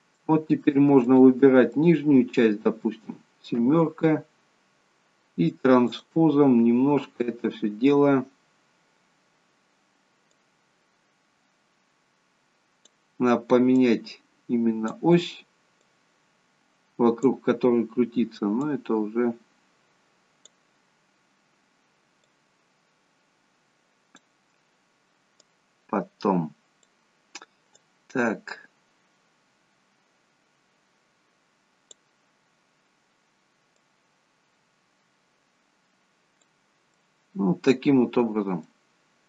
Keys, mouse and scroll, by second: 0.2 middle click, 1.0 click, 1.8 middle click, 3.6 KP_7, 6.0 click, 10.4 click, 13.8 click, 22.3 click, 25.5 click, 27.9 click, 33.8 click, 37.0 middle click, 38.3-38.8 scroll up 2, 38.7 middle click.